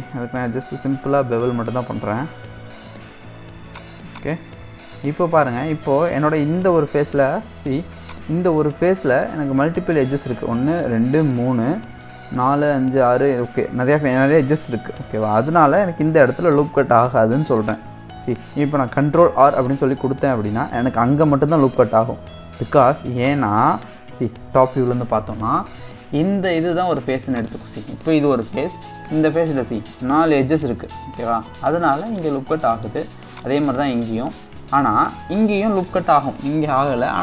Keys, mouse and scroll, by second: 1.5 ctrl+b, 4.1 click, 4.5-5.1 scroll up 1, 5.1 1, 8.1 click, 9.1-14.6 middle drag, 15.3-15.7 scroll down 2, 15.9-17.6 middle drag, 17.6 click, 19.6 ctrl+r, 23.6-24.7 middle drag, 24.7 KP_7, 27.3 click, 31.8-33.3 middle drag, 33.3 click, 35.0-37.2 middle drag.